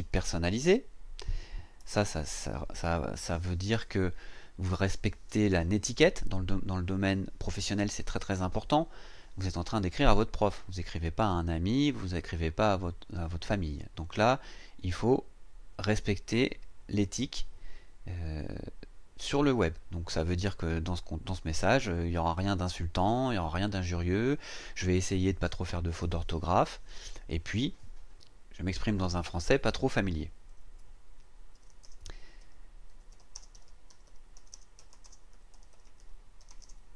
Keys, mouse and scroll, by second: 0.0-1.1 typing, 1.8 Return, 30.6 Return, 31.3-36.9 typing.